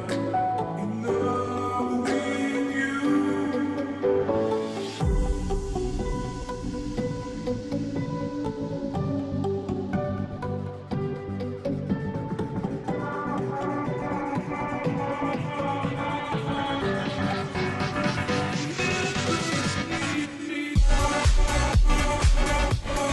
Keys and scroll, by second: 13.8-15.3 typing, 19.8 ctrl+g, 21.3-22.6 typing.